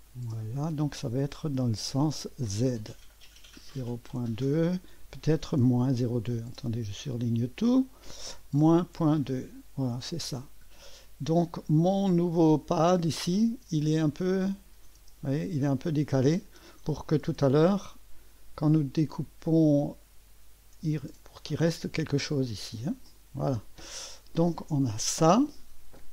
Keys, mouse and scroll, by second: 3.2 click, 7.3-8.6 drag, 8.3-10.6 typing, 9.9 Return, 11.3 click, 12.9 click, 13.7 space, 14.3-15.6 drag, 15.0 typing, 17.2 typing, 23.0 click.